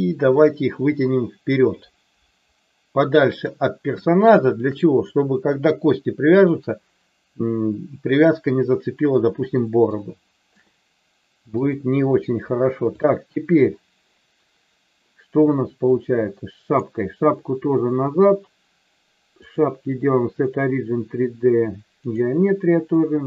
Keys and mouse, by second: 3.9 shift+middle click, 9.4 shift+middle click, 10.0 shift+middle click, 11.6 click, 12.9 click, 15.9 click, 19.4-22.0 drag.